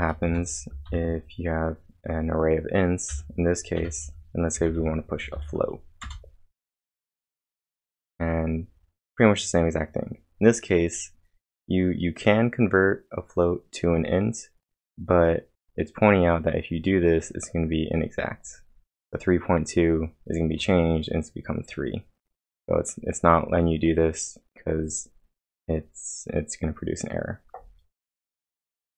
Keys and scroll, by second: 0.0-0.9 typing, 3.9-5.3 typing, 6.0 Return.